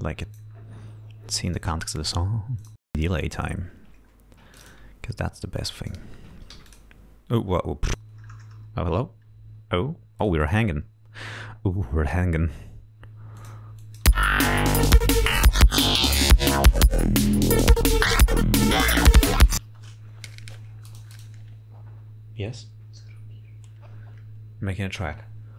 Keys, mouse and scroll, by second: 4.5 click, 5.5 click, 6.5 f, 6.6 click, 7.9-10.0 drag, 7.9 space, 13.4 click, 13.8 click, 14.1 space, 19.7 space.